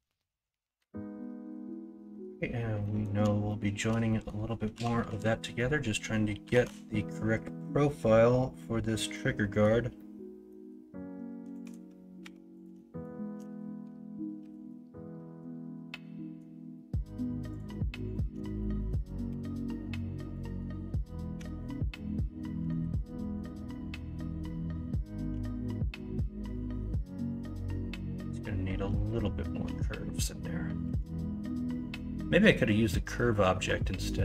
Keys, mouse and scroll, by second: 0.7 middle click, 1.2 middle click, 1.9 middle click, 2.8 middle click, 3.4 shift+middle click, 4.0 middle click, 4.7 KP_1, 5.0 KP_3, 6.5 alt+z, 9.1 middle click, 9.9 middle click, 12.2 1, 14.4 m, 19.2 m, 21.3 2, 22.5 KP_1, 22.7 KP_3, 25.3 g, 27.7 ctrl+z, 29.6 l, 30.8 s.